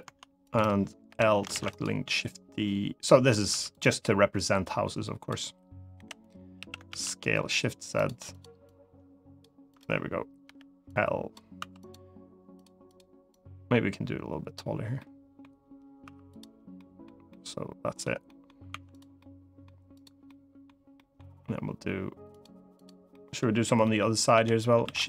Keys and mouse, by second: 0.8 l, 1.2 shift+d, 1.4 right click, 2.1 click, 3.2 3, 3.4 click, 4.4 click, 5.7 l, 6.3 s, 6.6 shift+z, 7.7 click, 8.0 click, 8.4 click, 10.2 l, 10.6 click, 11.3 2, 11.5 click, 12.3-14.3 drag, 14.7 middle click, 15.8 3, 16.5 middle click, 17.0 middle click, 18.0 middle click, 18.4 3, 18.6 click, 18.9 middle click, 19.7 click, 20.0 middle click, 20.7 middle click, 22.1 click, 22.8 middle click, 23.6 middle click, 24.1 l, 24.6 shift+d, 24.7 right click.